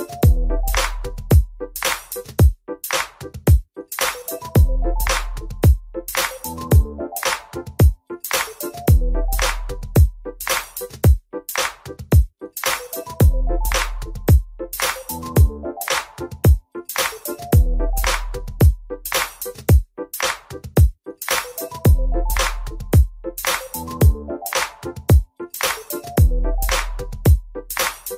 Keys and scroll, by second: 5.8 ctrl+space.